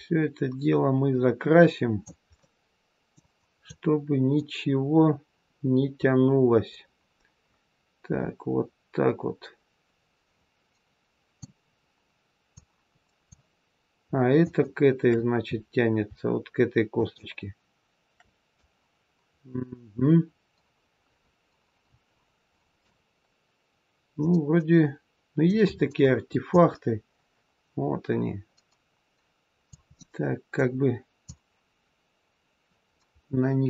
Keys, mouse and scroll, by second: 2.3 middle click, 3.5 click, 11.6-12.5 scroll down 1, 12.5 click, 12.5-13.6 scroll down 1, 14.3 shift+click, 15.4 scroll down 1, 16.8 shift+click, 17.3-17.8 shift+scroll down 1, 18.5 click, 24.1 middle click, 25.6-26.4 scroll up 2, 26.4 click, 26.4-27.1 scroll up 1, 29.8 middle click, 31.1 click.